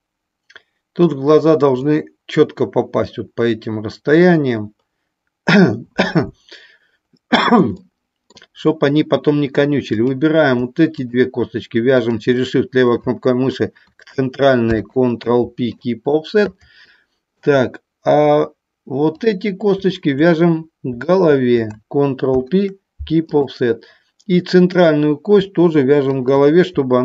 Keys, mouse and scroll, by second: 10.0 click, 10.9 shift+click, 12.1 shift+click, 19.1 click, 21.1 shift+click, 24.8 click, 26.1 shift+click.